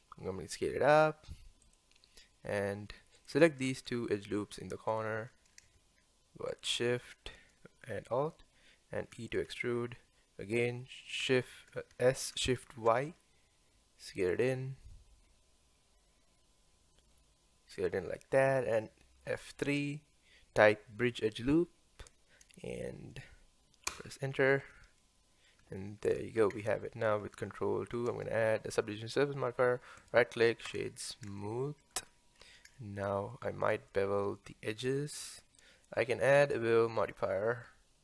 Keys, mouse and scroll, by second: 3.2 alt+click, 4.9 alt+click, 6.5 alt+shift+click, 9.2 e, 11.9 s, 19.3 F3, 25.0-26.5 middle drag, 26.5 Tab, 27.9 ctrl+2, 30.0-31.4 right drag, 31.4-32.1 shift+middle drag, 32.1-32.4 scroll up 1, 32.4-32.8 scroll down 1, 32.8-36.3 shift+middle drag, 36.3-38.0 drag.